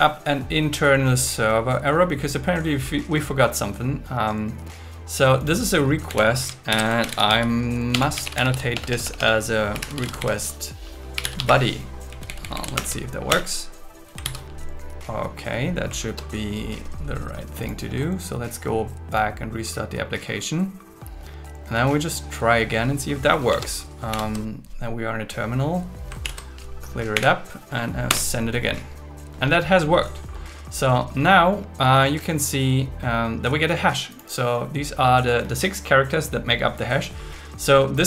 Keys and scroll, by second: 6.1 Left, 6.7 alt+l, 7.0 shift+r, 7.9 BackSpace, 8.7 BackSpace, 10.2 shift+b, 11.5 space, 12.1 Left, 12.8 alt+Return, 14.2 super+s, 24.1 ctrl+Tab, 24.5 ctrl+t, 26.2 ctrl+l, 27.1 Up, 28.1 Return.